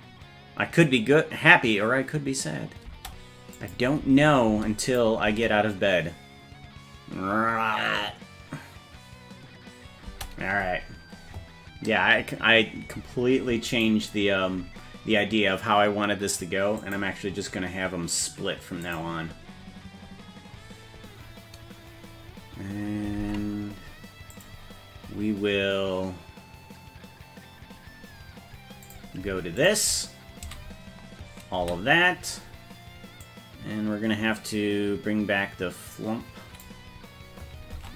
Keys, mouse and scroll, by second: 2.9 space, 3.6 click, 4.0 space, 4.5 space, 4.8 click, 5.3 space, 10.1 space, 13.7-17.0 right drag, 18.9 click, 23.2 ctrl+Tab, 24.3 click, 28.8 click, 29.6 shift+click, 30.5 a, 33.3-36.6 drag, 37.8 ctrl+Tab.